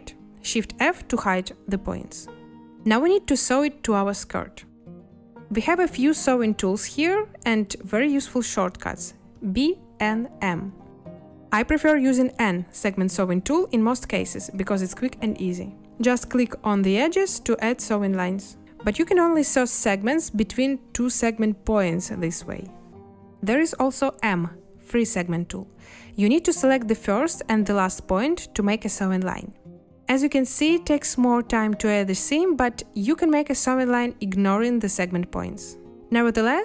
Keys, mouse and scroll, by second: 1.6 shift+f, 9.3 b, 9.9 n, 10.4 m, 12.4 n, 24.4 m.